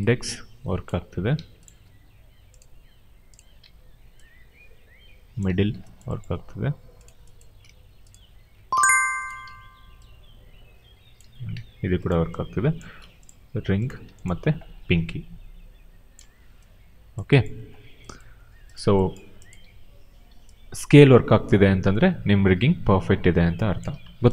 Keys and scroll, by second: 0.8 ctrl+z, 1.2 q, 3.5 e, 5.4 ctrl+z, 8.4 q, 9.3 e, 11.1 ctrl+z, 11.4 q, 14.2 e, 16.1 ctrl+z, 19.5 r, 23.8 ctrl+z.